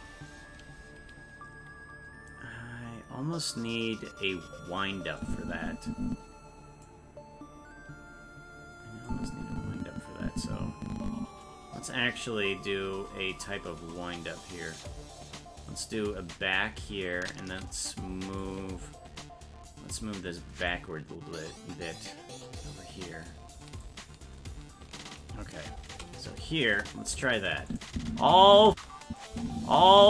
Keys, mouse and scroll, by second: 5.2-6.8 drag, 9.0-11.4 drag, 15.7-18.4 drag, 20.7-21.9 drag, 22.7 click, 23.8-25.9 shift+drag, 26.7 KP_0, 27.7 click, 27.9 space, 29.1 click, 29.3 space.